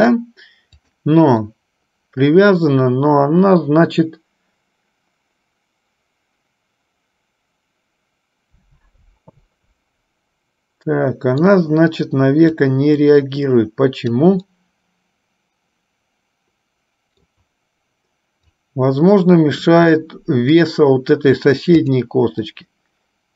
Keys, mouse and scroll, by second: 0.8-1.9 drag, 2.2-11.7 middle drag, 12.8-14.3 drag, 14.6 scroll up 1, 14.7-17.6 middle drag, 18.6 click, 18.9 click, 20.1 middle click, 21.9-23.1 drag, 23.2 middle click.